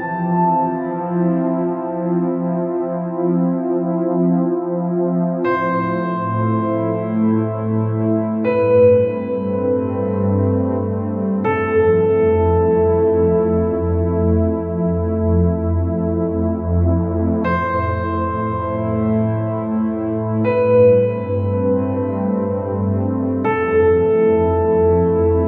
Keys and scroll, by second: 12.8 ctrl+z.